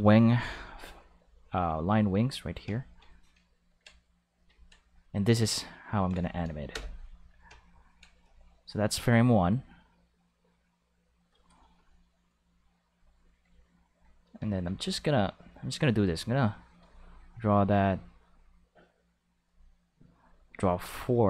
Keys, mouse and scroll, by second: 1.7 click, 3.4 ctrl+click, 3.9 click, 4.5 ctrl+click, 6.7 n, 9.4-11.2 drag, 12.8 click, 14.6 ctrl+z, 16.0 click, 17.8 click, 19.2 click, 19.9 click, 20.7 click.